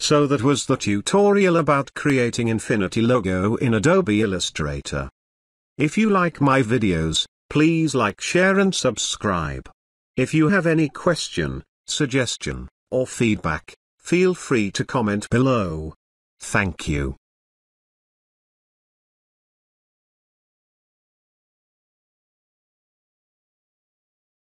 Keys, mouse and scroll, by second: 8.4 space, 8.6-9.2 ctrl+drag, 17.1 ctrl+space, 17.2 ctrl+click, 17.5-17.9 ctrl+space, 17.9-19.7 click, 18.3 space, 18.4-21.8 ctrl+drag.